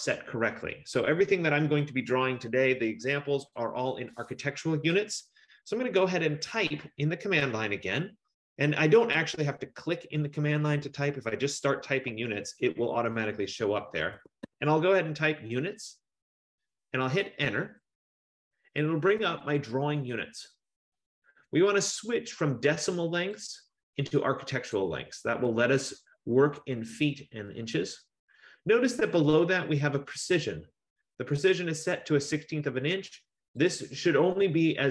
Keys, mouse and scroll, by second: 11.7-12.6 typing, 14.0-15.0 typing, 17.7 Return, 19.9 F15, 23.4 click, 24.8 click, 33.8 click.